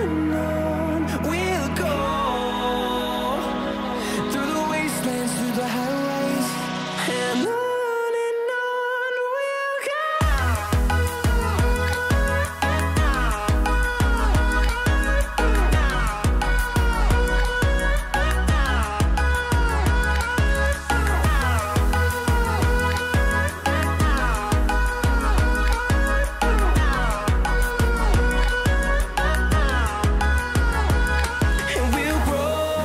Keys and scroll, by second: 28.8 ctrl+t.